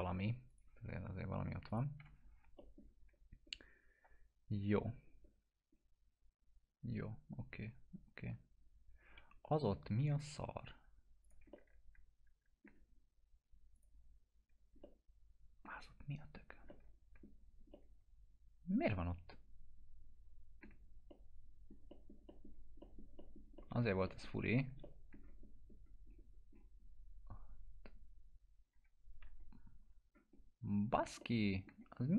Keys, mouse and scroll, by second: 0.5 click, 2.0 F4, 2.6 middle click, 3.1 scroll up 1, 6.2 scroll down 1, 9.2 1, 10.2 click, 11.5-12.8 alt+middle drag, 13.8 click, 14.4 scroll down 1, 14.8-15.8 alt+middle click, 15.9-16.6 scroll up 2, 16.7 alt+middle click, 17.4 scroll down 2, 18.0-20.8 alt+middle drag, 21.4-21.7 middle click, 22.5 scroll down 1, 23.8 middle click, 23.8 scroll down 1, 24.1 middle click, 24.8 alt+middle click, 25.4 scroll up 1, 28.8 alt+q, 29.8 scroll down 1, 30.3 scroll up 1, 31.2-31.8 alt+middle click, 32.0 scroll up 1.